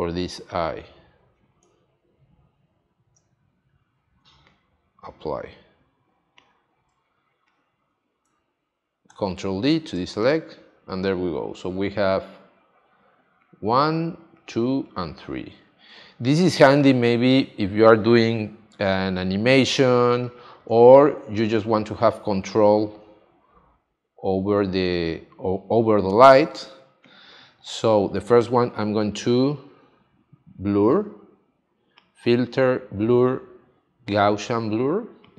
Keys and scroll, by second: 2.9 shift+F5, 6.9 space, 9.1 super+d, 9.9 space, 15.9 space, 19.9 space.